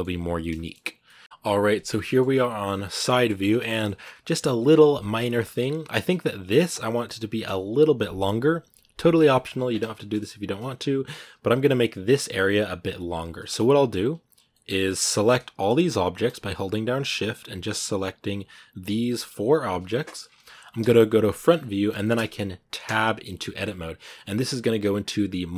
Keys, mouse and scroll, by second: 0.6 scroll down 2, 0.8-3.2 middle drag, 3.2 scroll up 1, 3.6 shift+middle click, 4.2 scroll down 1, 5.2 shift+middle click, 5.4 scroll up 2, 6.1-7.8 right drag, 7.8 scroll down 2, 9.1 shift+middle click, 9.4 scroll up 2, 9.7 shift+middle click, 10.0-10.4 scroll up 2, 10.9 scroll down 2, 12.6 scroll up 2, 13.2 shift+middle click, 13.3-14.1 scroll down 2, 14.1 scroll up 1, 14.3 middle click, 15.0-17.7 right drag, 17.7-18.7 scroll down 2, 18.7 scroll down 1, 18.9 g, 20.6 KP_1, 21.3 scroll up 2, 21.8 shift+middle click, 22.6 Tab.